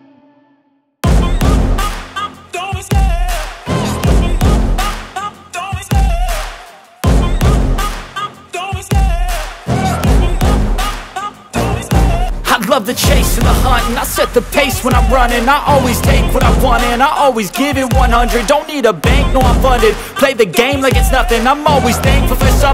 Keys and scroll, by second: 0.6 F3, 2.0 F2, 11.8 Escape, 18.7 F2, 19.3 Escape.